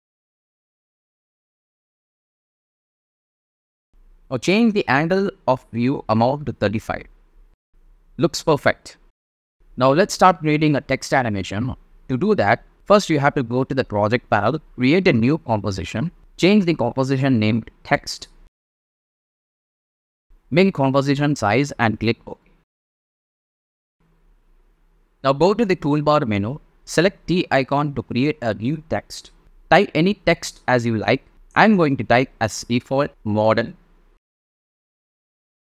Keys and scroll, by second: 5.2 3, 5.5 5, 5.8 Home, 18.0-19.7 typing, 31.7-34.7 typing.